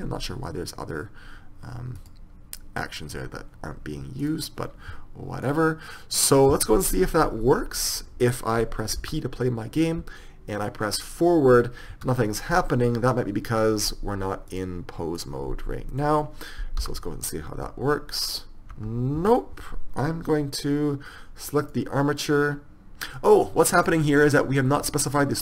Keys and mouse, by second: 7.9 middle click, 12.4 p, 15.7 click, 16.4 right click, 19.6 p, 22.1-25.4 right drag.